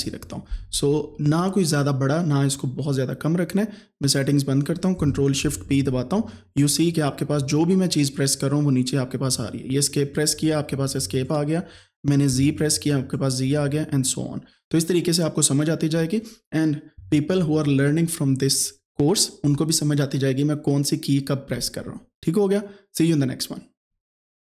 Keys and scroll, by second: 5.6 ctrl+shift+p, 7.4 Escape, 9.3 Escape, 10.3 Escape, 13.5 Escape.